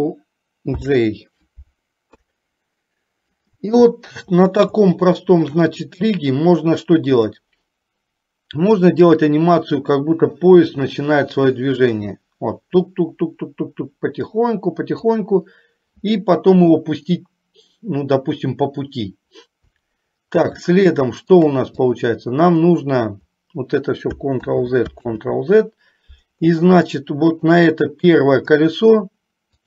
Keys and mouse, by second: 0.8 ctrl+j, 2.2 KP_3, 5.1-5.9 shift+middle drag, 7.4 click, 8.9 click, 9.1-15.5 drag, 20.9-21.8 shift+middle drag, 22.1 drag, 24.5 ctrl+z, 25.4 ctrl+z, 27.1-27.9 shift+middle drag.